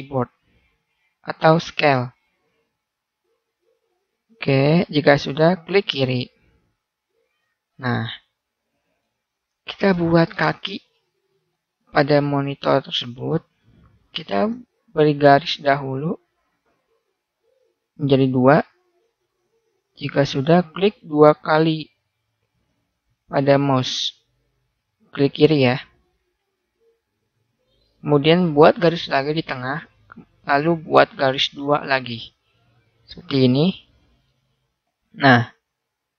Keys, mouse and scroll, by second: 6.7 click, 7.5-8.9 middle drag, 12.2 middle click, 14.2 ctrl+r, 20.9-22.2 middle drag, 28.6 ctrl+r, 30.3-31.5 drag, 34.5 right click, 35.3 right click, 35.5 right click.